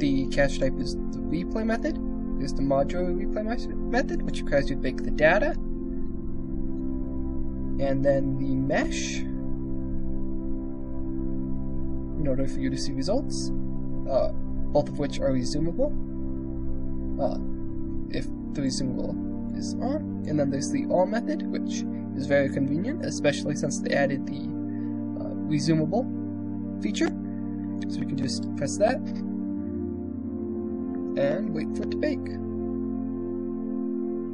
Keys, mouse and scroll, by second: 0.3-1.8 drag, 3.9-7.1 drag, 8.4-11.6 drag, 11.9 middle click, 16.4 click, 19.2 click, 26.8-34.3 drag.